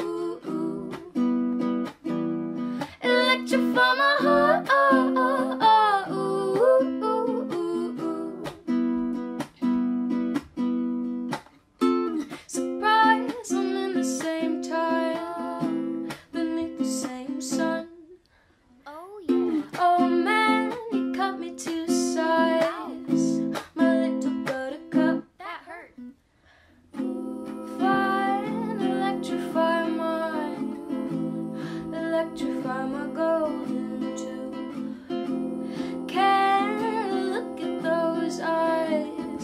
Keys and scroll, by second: 18.8 ctrl+alt+shift+y.